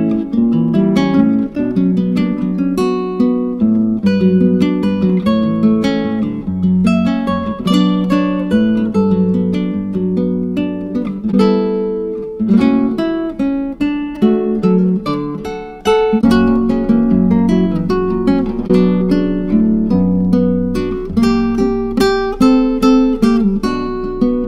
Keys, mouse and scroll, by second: 7.7 click, 10.1-13.8 drag, 15.9 BackSpace, 23.3-24.4 drag.